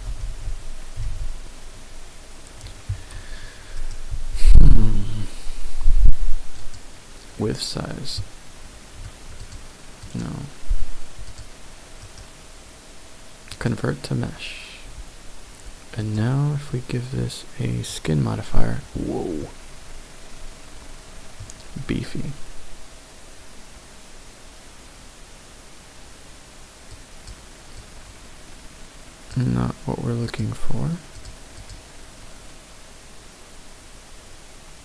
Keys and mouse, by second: 0.8 ctrl+z, 1.5 ctrl+z, 2.4 ctrl+z, 3.8-6.9 right drag, 9.4 click, 10.0 click, 11.3 click, 16.0-18.2 drag, 19.4-21.4 middle drag, 26.9 click, 27.8-29.4 drag, 30.3 click, 31.2 click, 31.7 click.